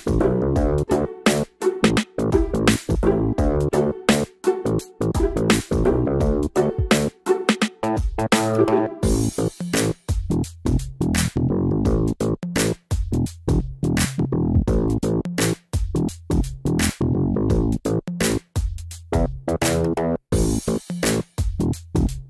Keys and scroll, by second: 14.4 shift+F5.